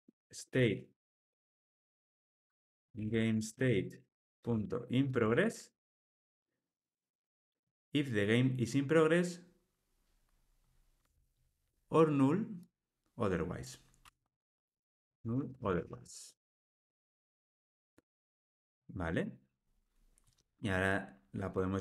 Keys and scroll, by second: 11.0 Tab.